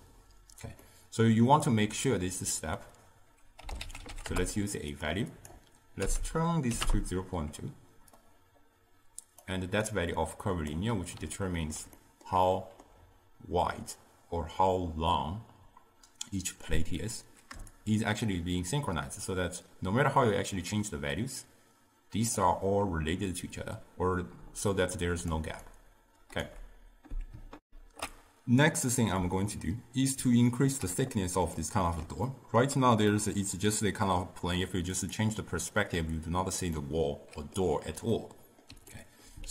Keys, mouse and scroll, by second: 0.9-2.6 middle drag, 2.6 drag, 5.4-10.0 drag, 11.5-15.6 ctrl+middle drag, 17.8-20.8 shift+drag, 24.5 d, 24.8 click, 25.4-25.7 d, 25.8 right click, 26.6 d, 27.7 ctrl+alt+shift+q, 29.5-35.0 middle drag, 35.0 click, 36.8-39.5 middle drag.